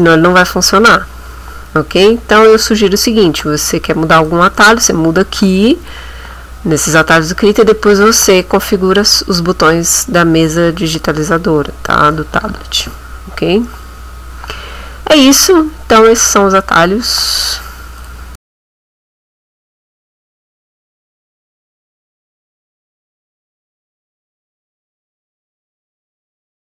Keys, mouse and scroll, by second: 4.2 click, 18.0 click.